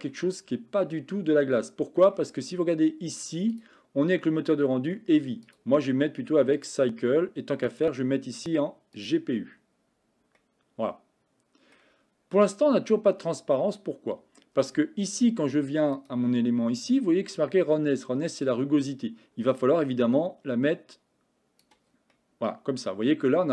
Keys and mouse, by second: 0.2-2.1 middle drag, 3.6 click, 5.6-6.9 drag, 7.8-9.5 drag, 10.5-11.9 middle drag, 16.1 click, 18.5-21.7 drag, 22.2-23.5 middle drag.